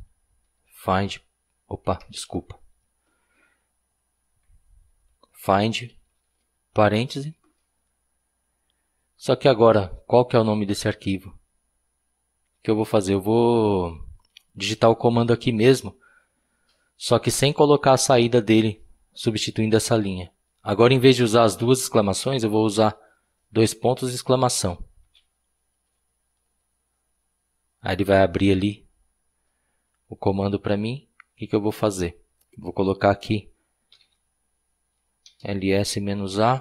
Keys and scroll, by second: 0.5-1.8 typing, 4.9-6.2 typing, 25.0-25.7 typing, 33.7-35.8 typing.